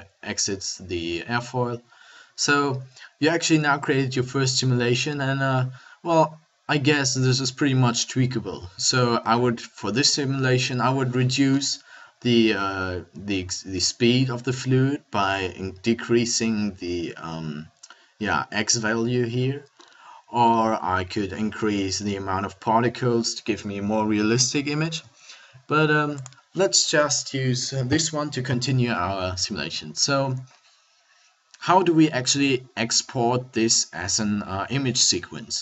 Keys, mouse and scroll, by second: 22.6-23.6 middle drag, 26.2-35.6 drag.